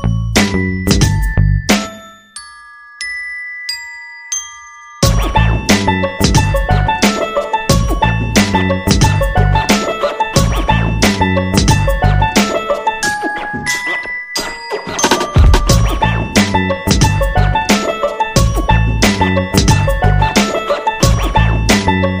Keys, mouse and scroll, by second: 0.7-4.6 drag, 6.6 Delete, 7.7-15.6 drag, 16.6 Left, 18.4 click.